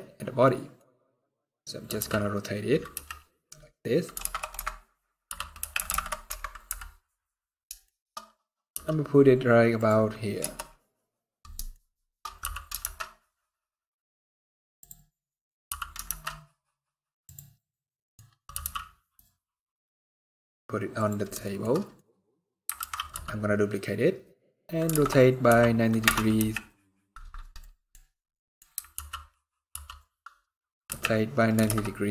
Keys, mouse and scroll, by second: 0.1 middle click, 0.8 middle click, 1.1 scroll up 2, 1.5 r, 6.3 KP_7, 7.5 shift+middle click, 7.8 shift+scroll up 2, 8.4 g, 10.1 KP_0, 11.4 shift+middle click, 12.1 g, 14.7-15.1 scroll down 5, 15.1-15.6 scroll up 3, 15.3 g, 17.3 middle click, 17.9 scroll up 2, 18.2 g, 21.1 shift+middle click, 21.4 middle click, 21.7 scroll up 2, 22.5 alt+d, 26.0 x, 27.3 middle click, 27.7-28.1 scroll down 1, 28.1 scroll up 1, 28.1 middle click, 28.6 alt+r, 29.4 r.